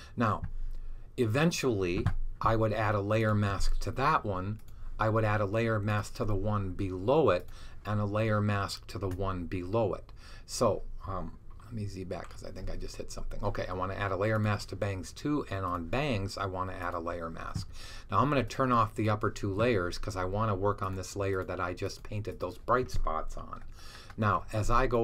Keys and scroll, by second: 12.0 z.